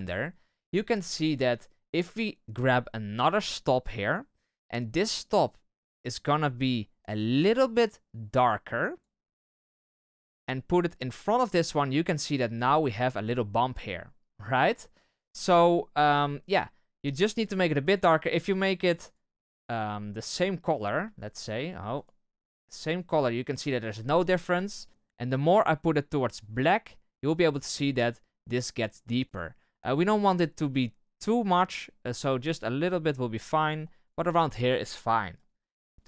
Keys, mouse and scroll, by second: 0.0-0.4 scroll up 4, 3.5-13.8 drag, 13.8-16.5 middle drag, 16.5-18.1 drag.